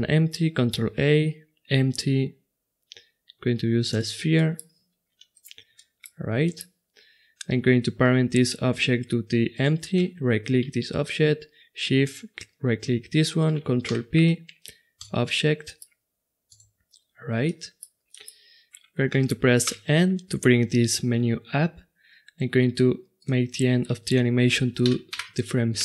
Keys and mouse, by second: 0.0-2.3 middle drag, 12.2 right click, 13.9 ctrl+p, 17.3 right click, 17.4-18.2 middle drag, 18.3-19.6 middle drag, 19.6 n, 23.2-25.8 drag.